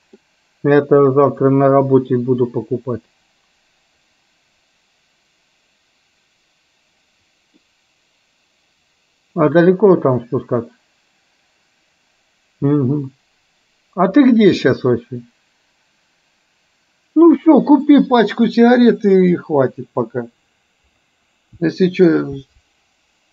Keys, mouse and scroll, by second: 0.3-7.8 middle drag.